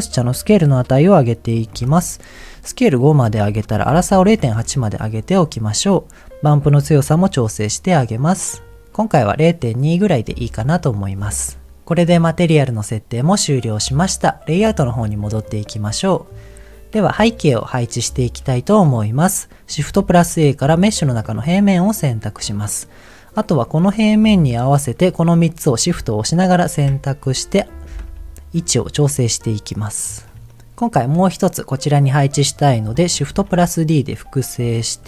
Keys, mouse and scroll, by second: 3.2-4.6 drag, 6.9-8.7 drag, 10.8-11.1 scroll down 2, 10.9 scroll up 1, 11.1-11.5 scroll down 2, 11.5 scroll up 1, 11.6 scroll down 1, 11.7 middle click, 12.6 middle click, 15.4 click, 19.0 click, 19.9 shift+a, 21.9 middle click, 23.5 click, 24.0 shift+click, 24.4 shift+click, 26.8 KP_1, 28.2 g, 28.2 z, 29.9 click, 30.2 scroll up 1, 33.6 shift+d.